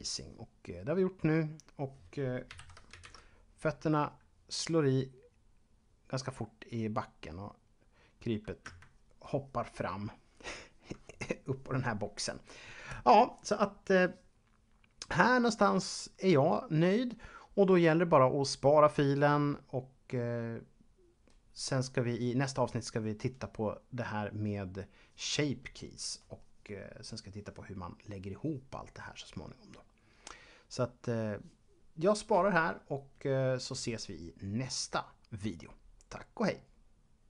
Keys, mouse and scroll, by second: 2.5 shift+Left, 8.5 Escape, 37.2 click.